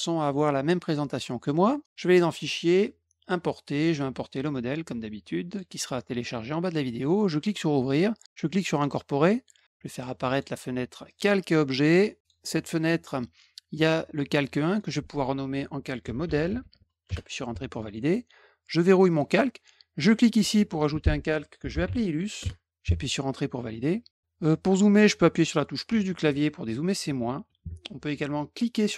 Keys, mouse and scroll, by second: 1.5 middle click, 2.1 click, 3.1 click, 5.4 click, 7.1 click, 8.7 click, 10.2 click, 11.0 click, 12.2 click, 14.6 click, 14.8 click, 15.7-17.1 typing, 19.0 click, 20.3 click, 21.0-22.3 typing, 22.3 Return, 28.7 middle click.